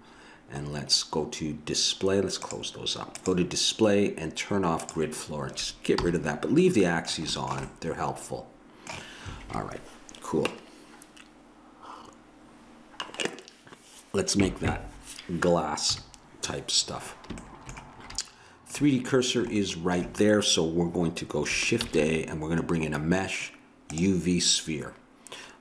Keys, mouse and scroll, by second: 2.4-6.0 drag, 6.0 n, 6.6-9.4 middle drag, 15.9 KP_3, 21.8 shift+a.